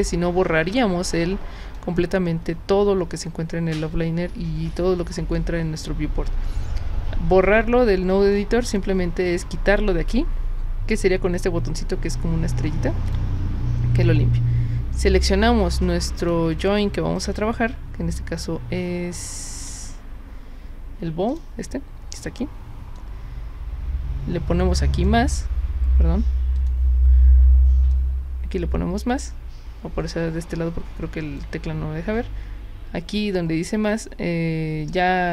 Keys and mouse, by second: 1.1-1.7 drag, 8.3-8.7 drag, 13.1 click, 15.5-16.3 drag, 16.5 drag, 17.2 click, 19.6 click, 21.3 click, 22.9-25.0 drag, 26.5 click, 27.9-31.4 drag.